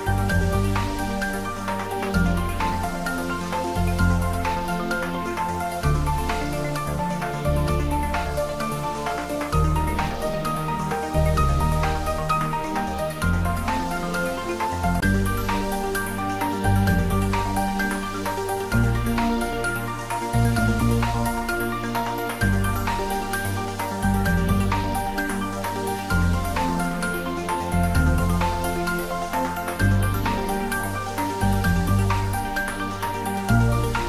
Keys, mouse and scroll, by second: 0.9 click, 4.5 click, 14.3 click, 30.2 click, 32.8 right click.